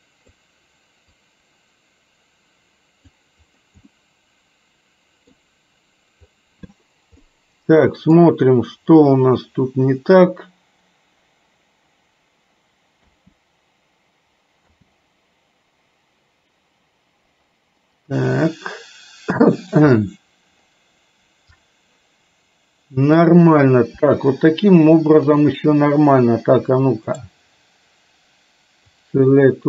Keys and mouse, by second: 1.3-3.3 drag, 4.0-5.5 middle drag, 7.4 middle click, 13.1 space, 14.8 space, 18.2-20.2 middle drag, 23.3 click, 25.0 shift+click, 27.2-29.1 right drag.